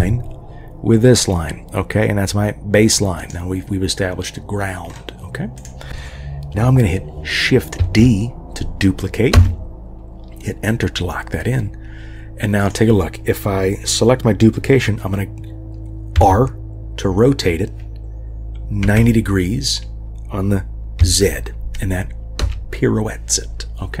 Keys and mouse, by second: 7.8 shift+d, 12.6 click, 16.1 r.